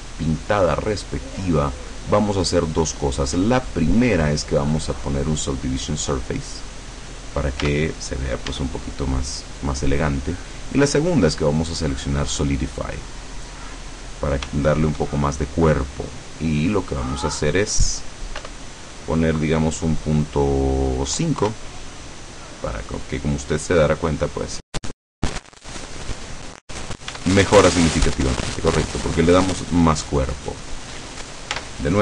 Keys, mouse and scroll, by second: 1.3 click, 2.2-6.0 drag, 7.7 Tab, 8.6 Tab, 10.6-13.3 drag, 14.6 shift+middle click, 16.6 click, 17.2 click, 18.6 BackSpace, 21.2 KP_5, 21.6 KP_Enter, 24.5-27.1 middle drag, 27.2 Tab, 30.5 right click, 31.6 Tab.